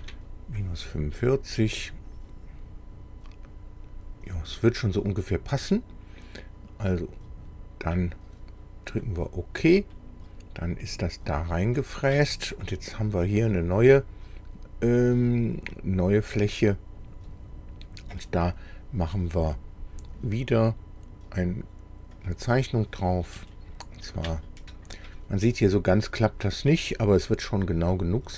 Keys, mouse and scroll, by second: 0.0 Tab, 1.2-4.6 middle drag, 4.7 scroll down 1, 5.7-7.3 middle drag, 9.0 click, 9.9-11.1 middle drag, 16.4 click, 17.9-18.2 scroll up 1, 18.3-19.6 middle drag, 22.2 click, 23.5 shift+click.